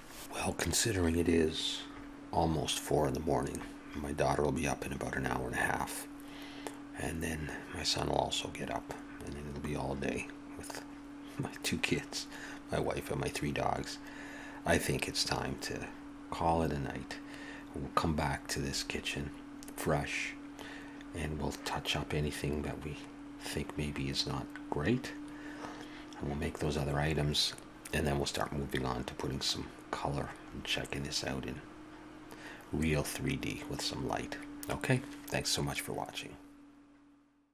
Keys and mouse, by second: 29.9-34.7 middle drag.